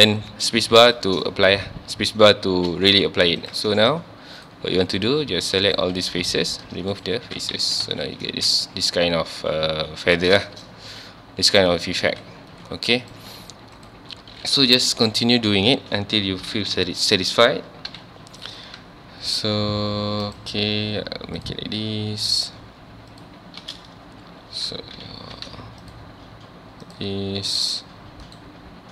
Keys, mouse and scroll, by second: 1.0 shift+middle click, 1.4 z, 3.4 click, 4.4 shift+click, 5.0 shift+click, 5.7 shift+click, 6.3 x, 7.5 Tab, 7.9 alt+a, 8.1 scroll down 1, 8.3 ctrl+s, 9.3-9.8 scroll up 1, 10.5-10.9 shift+middle drag, 10.9 z, 13.0 click, 13.8 click, 14.9 k, 16.8 Tab, 17.9 k, 23.7 space, 25.0 k.